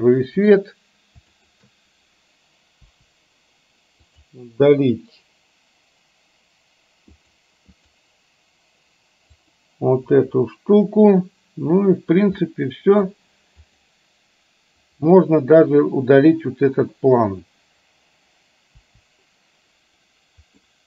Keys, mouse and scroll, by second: 0.5 click, 1.4 shift+click, 3.0 Delete, 4.1 click, 7.4 click, 9.5 click, 10.4 Delete, 12.6-13.4 middle drag, 13.8 click, 18.9 Delete, 20.6-20.8 middle drag.